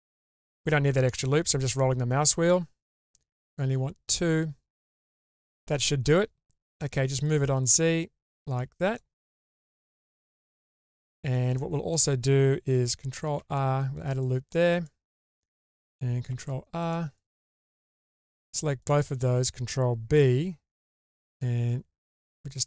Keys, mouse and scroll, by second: 7.3 click, 8.9 click, 9.3 scroll down 1, 9.5-10.9 middle drag, 11.1 scroll up 2, 11.6 middle click, 13.4 ctrl+r, 15.2-15.5 middle drag, 16.3 ctrl+r, 17.7-18.1 middle drag, 18.8 alt+shift+click, 20.2 ctrl+b.